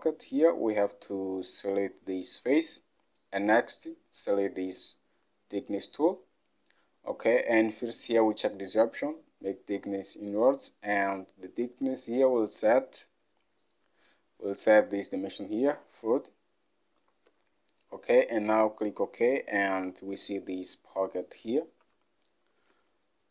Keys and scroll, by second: 11.7 alt+Tab, 17.1-17.4 typing, 21.9 Home, 22.8 alt+Tab.